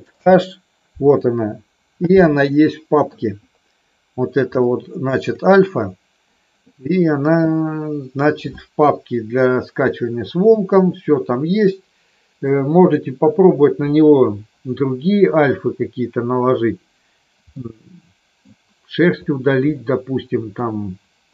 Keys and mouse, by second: 0.2 alt+h, 2.4 middle click, 4.6 shift+middle click, 17.6 middle click, 19.7-20.7 middle drag.